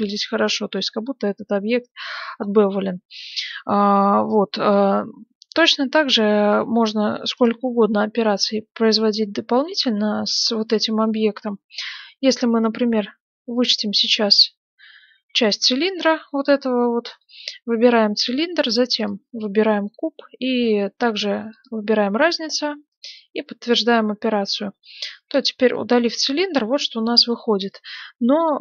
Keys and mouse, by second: 7.3 click, 8.0-9.5 right drag, 9.5 g, 14.1-17.0 drag, 15.1 s, 15.8 g, 18.6-28.5 drag, 24.3 right click, 25.1 x, 28.5-28.6 middle drag.